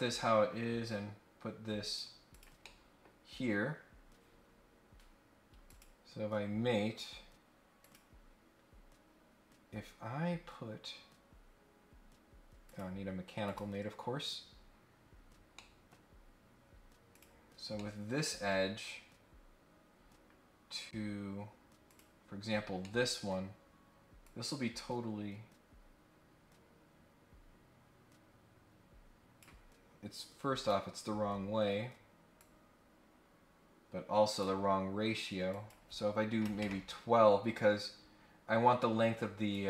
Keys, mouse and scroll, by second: 0.8-1.9 drag, 2.3 click, 2.6 middle click, 5.7 click, 7.8 click, 12.6 click, 13.4 click, 14.9 scroll down 1, 15.2 scroll up 1, 15.5 middle click, 17.1 click, 17.7 middle click, 18.5-19.2 scroll down 3, 19.9 scroll up 1, 21.8 click, 22.8 middle click, 24.2-29.4 drag, 30.5 click, 32.3-34.4 drag, 35.5 click, 39.5 click.